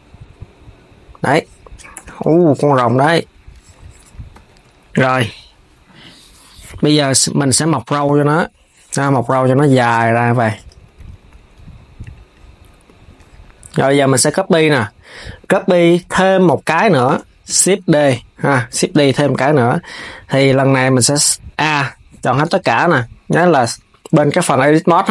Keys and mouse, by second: 1.6 KP_3, 3.0 s, 4.1 s, 7.3 s, 10.7 s, 11.7 click, 15.9 KP_3, 17.2 shift+d, 19.5 Tab.